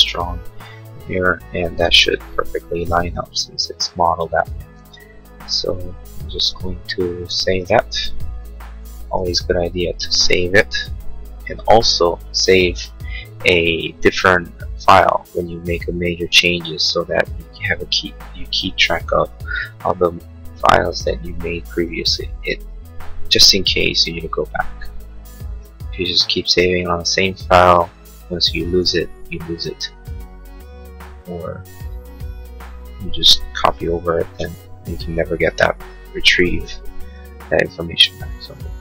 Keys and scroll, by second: 2.7 space, 8.7 Right, 8.8 Left, 10.0 BackSpace.